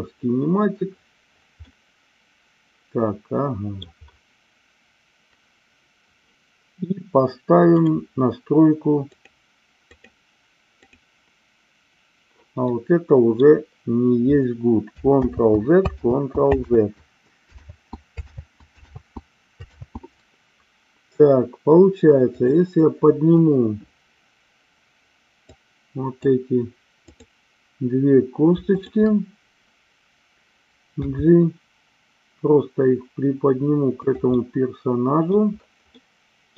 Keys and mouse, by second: 1.7-3.9 middle drag, 7.6 click, 9.8 click, 12.7-13.4 middle drag, 15.2 ctrl+z, 16.1 ctrl+z, 16.7 ctrl+z, 17.7 ctrl+z, 18.3 ctrl+z, 18.9 ctrl+z, 19.8 ctrl+z, 22.3 click, 25.5 click, 27.2 click, 28.7-29.8 shift+drag, 31.0 g, 34.0 click, 34.3 middle click, 36.0 middle click.